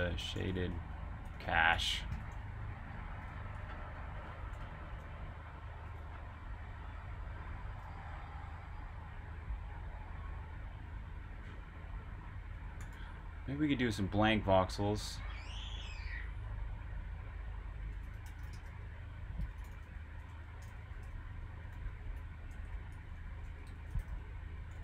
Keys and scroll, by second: 0.0-0.2 typing, 2.1-2.8 typing, 3.2 super+Tab, 4.6 ↻, 7.6 j, 9.9-10.7 typing, 12.5-16.2 typing, 17.7-20.2 typing, 21.5-22.6 typing.